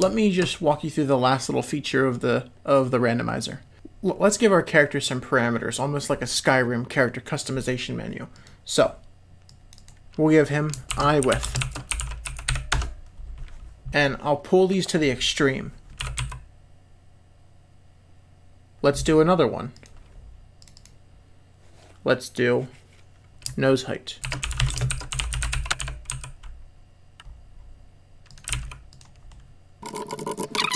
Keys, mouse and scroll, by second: 0.1 shift+middle drag, 8.4 click, 9.5 click, 9.7-13.2 drag, 13.9 l, 16.0 s, 19.7 click, 20.7-25.7 drag, 25.7 g, 25.7 r, 28.5 g, 29.3 click.